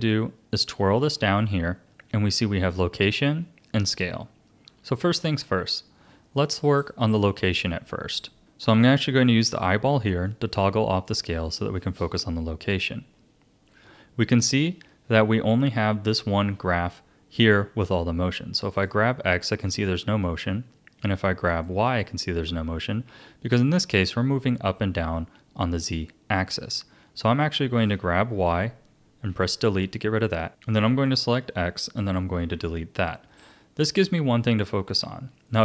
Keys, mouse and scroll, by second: 0.5 click, 10.2-13.4 drag, 14.2 a, 18.7 click, 21.5 click, 27.3 click, 29.3 Delete, 30.5 click, 31.0 click, 32.4 Delete, 34.8-35.4 scroll down 1, 35.4-35.6 shift+middle drag.